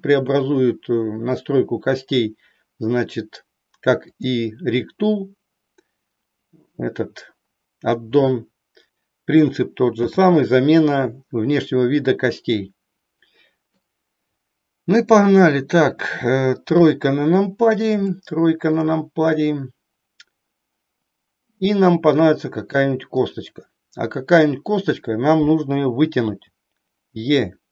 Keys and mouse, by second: 4.1 click, 9.8 n, 12.6-13.8 middle drag, 16.6 KP_3, 18.1 shift+middle click, 23.2 click, 26.3 e.